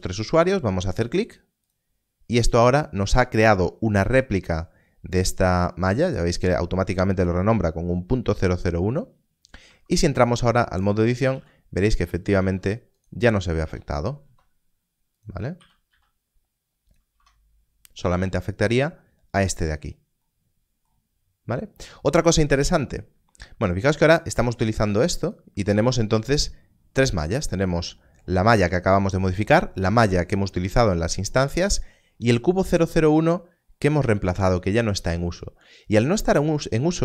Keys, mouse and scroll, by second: 1.6 click, 9.6 Tab, 10.8 click, 11.8 click, 12.3 ctrl+r, 12.9 right click, 14.1 ctrl+b, 15.1 click, 15.5 e, 15.9 s, 17.1 Tab, 25.2 Tab.